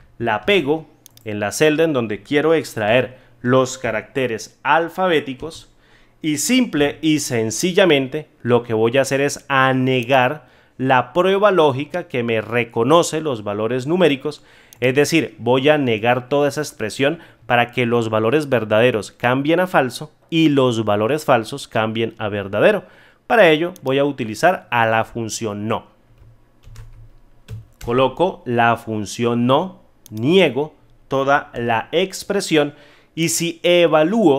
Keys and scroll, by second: 2.8 F2, 5.3 ctrl+v.